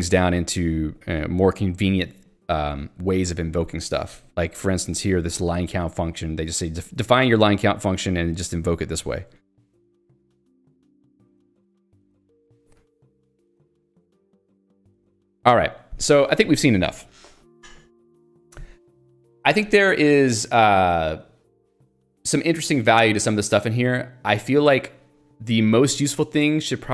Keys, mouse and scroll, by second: 0.0-0.9 typing, 2.4 k, 5.5 j, 5.8 k, 6.8 j, 8.2 k, 9.3 j, 14.1 ctrl+d.